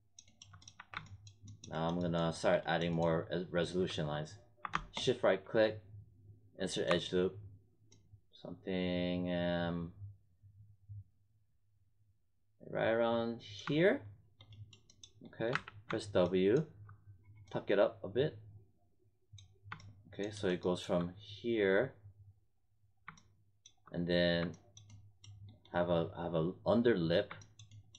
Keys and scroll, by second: 0.7 1, 15.4 w.